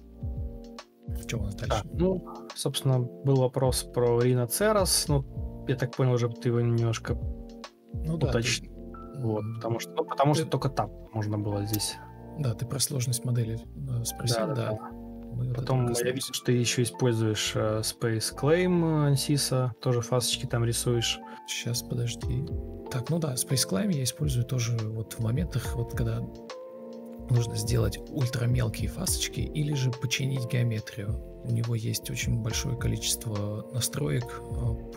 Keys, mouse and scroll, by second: 0.5 ctrl+e, 0.5 ctrl+space, 1.4 ctrl+space, 2.0 ctrl+u, 2.5 Escape, 6.6 Down, 11.0 shift+click, 13.0 ctrl+z, 13.2 ctrl+z, 14.0 ctrl+l, 14.0 ctrl+click, 15.8 typing, 17.1 ctrl+click, 17.2-18.1 typing, 20.4 Return, 20.4-21.7 typing, 22.8 ctrl+click, 25.5 Escape, 25.7 ctrl+z, 26.4 ctrl+click, 26.9 ctrl+click, 29.9 ctrl+z, 32.5-33.3 typing.